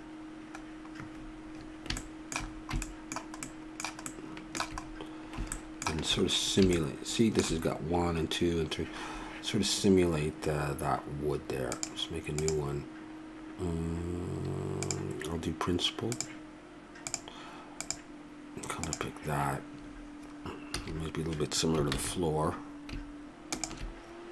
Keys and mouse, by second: 2.2-10.5 middle drag, 11.8-14.2 drag, 14.8-19.1 drag, 20.7 a, 22.3 shift+z, 23.8-24.3 drag.